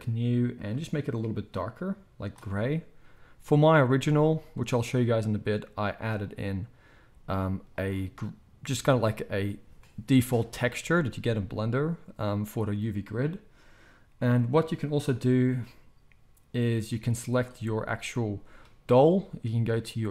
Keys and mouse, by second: 3.8 z, 7.1 z, 17.2 click, 17.2 middle click.